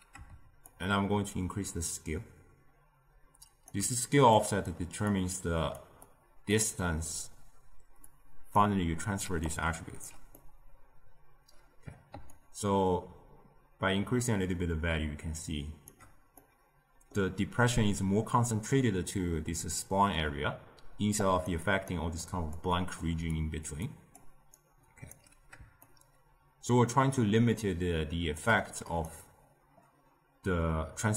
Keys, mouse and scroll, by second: 0.6-3.7 shift+drag, 4.3 click, 5.0 drag, 6.0-9.1 drag, 9.1 d, 9.3 right click, 10.3-12.3 middle drag, 12.3-15.4 shift+drag, 16.3-20.8 middle drag, 20.8-25.0 typing, 21.1 click, 21.5 click, 22.1 drag, 22.7 click, 23.3 drag, 23.8 click, 24.5 right click, 25.8-28.9 shift+drag.